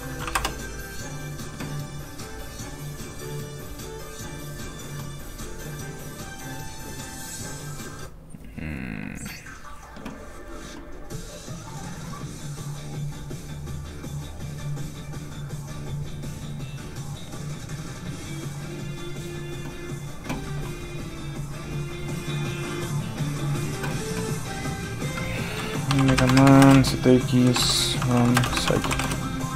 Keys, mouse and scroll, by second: 0.0-0.3 typing, 0.4 Return, 2.4-2.9 scroll down 1, 6.7-7.1 scroll up 1, 7.6 click, 9.2-11.1 scroll down 1, 19.9-21.5 scroll up 1, 25.9-28.9 typing, 29.0 Return.